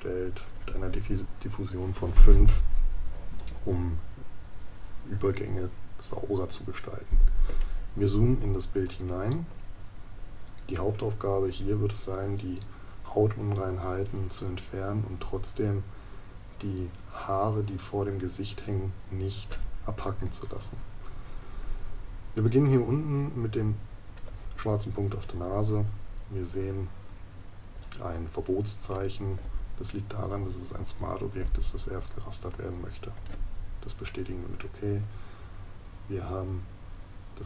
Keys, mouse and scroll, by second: 8.4 ctrl+KP_Add.